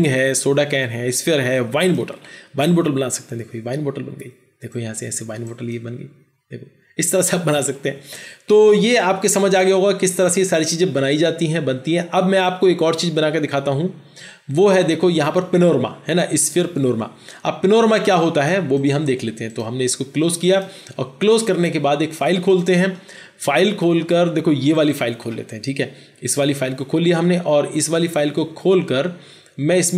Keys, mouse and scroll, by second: 24.8 double click.